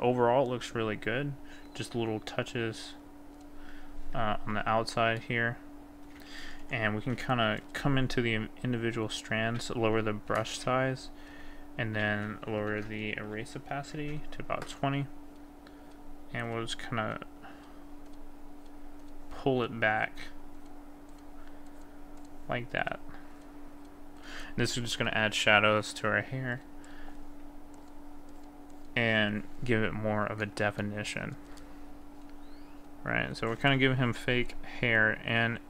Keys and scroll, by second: 12.8 ctrl+z, 14.0 ctrl+KP_0.